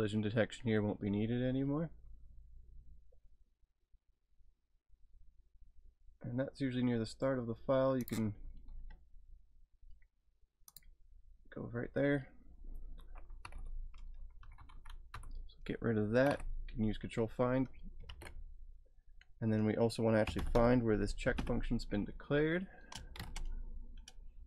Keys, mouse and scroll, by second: 1.9 scroll down 3, 6.4-7.6 scroll up 1, 8.0 scroll up 1, 8.0 click, 10.7 click, 11.1-12.0 scroll up 1, 13.4 typing, 14.4 Down, 14.6 Down, 14.7 Down, 16.2 *, 16.4 /, 18.1 ctrl+f, 20.0-21.4 typing, 22.9-23.7 typing.